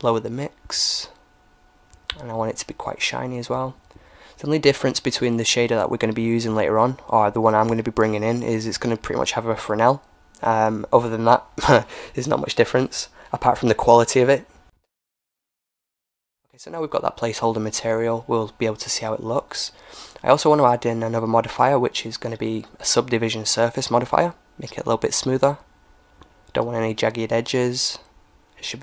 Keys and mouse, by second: 4.4-6.2 drag, 7.5-9.5 drag, 9.8-11.4 middle drag, 11.4-14.1 drag, 15.1-17.1 drag, 19.4-21.3 drag, 22.4-24.2 drag, 25.7-27.6 drag, 27.6-28.8 drag.